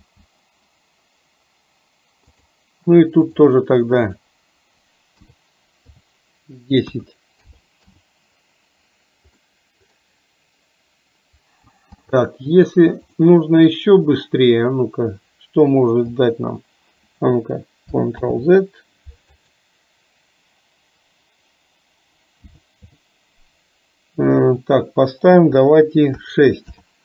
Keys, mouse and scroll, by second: 2.4 click, 3.4-8.0 drag, 9.5 middle click, 13.3-26.9 drag.